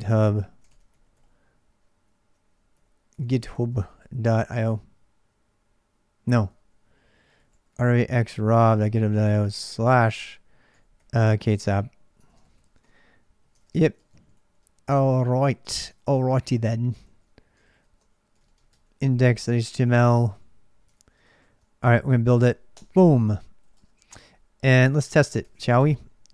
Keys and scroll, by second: 0.0-4.7 typing, 6.2 ctrl+[, 6.2-18.5 typing, 13.3 ctrl+[, 15.7 ctrl+[, 16.8 ctrl+[, 18.5 Tab, 19.0 Return, 19.7 ctrl+[, 19.7-25.6 typing.